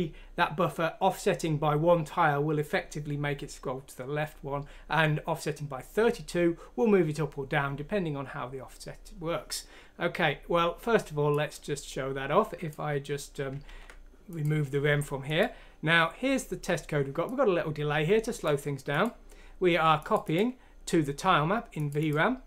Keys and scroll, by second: 13.6 ctrl+q.